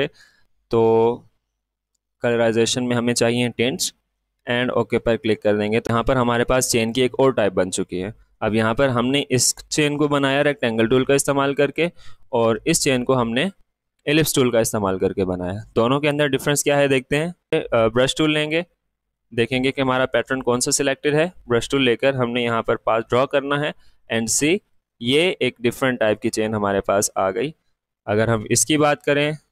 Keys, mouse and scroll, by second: 1.7 click, 7.6 click, 7.7 alt+scroll down 1, 8.8 click, 11.4-14.0 drag, 17.5 click, 19.4 click, 21.9-25.6 drag, 26.3-29.5 drag.